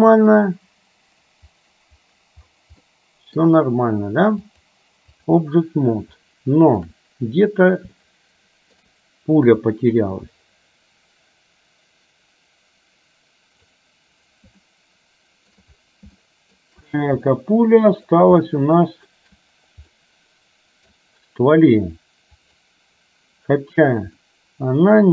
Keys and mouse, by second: 3.0 middle click, 4.7 click, 6.2 shift+middle click, 8.2 shift+middle click, 9.8-14.0 drag, 14.8 shift+middle click, 16.3 shift+middle click, 17.5 middle click, 18.5 shift+middle click, 20.1 middle click, 22.5 click, 24.2-25.1 middle drag.